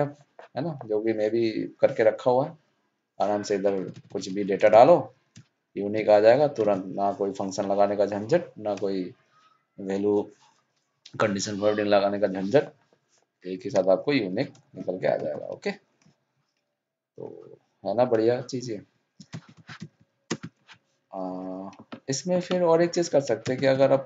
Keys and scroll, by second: 6.6 ctrl+shift+Down.